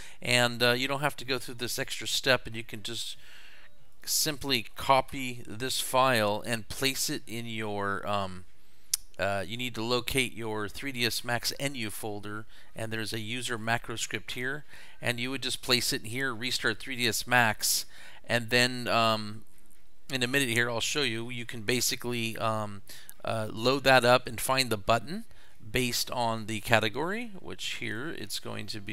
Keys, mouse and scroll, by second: 3.9 click, 4.4 click, 5.1 ctrl+c, 13.4 click, 13.7 click, 14.6-15.3 scroll down 2, 15.3-16.7 scroll up 3, 26.4 right click, 27.9 click.